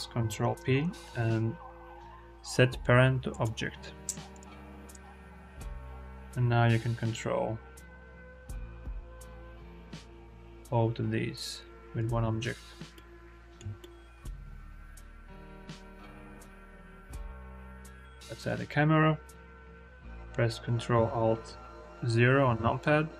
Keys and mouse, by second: 0.4 ctrl+p, 5.6 g, 5.8 y, 12.8-13.4 shift+middle drag, 13.6 middle click, 14.8 click, 15.2 shift+a, 17.2 shift+a, 22.4 ctrl+alt+KP_0.